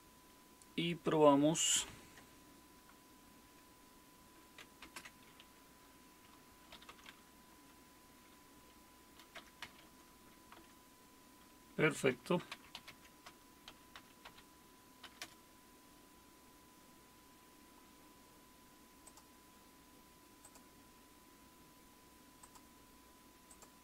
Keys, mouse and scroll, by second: 1.8 super+2, 4.8 super+space, 6.5-7.4 typing, 9.4-10.3 typing, 10.5 Return, 11.9-15.0 typing, 15.2 Return, 19.0 click, 20.4 click, 22.4 click, 23.5 click.